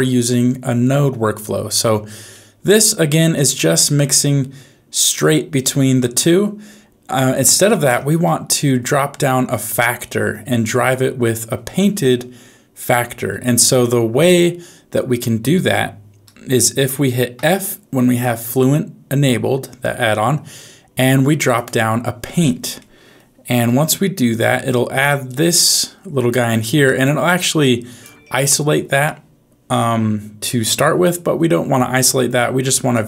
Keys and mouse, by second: 2.4 middle click, 3.4-7.5 drag, 8.4 middle click, 17.3 f, 22.9 middle click, 23.8 g, 25.2-26.2 drag, 26.8 middle click, 27.6 click, 32.9 ctrl+shift+click.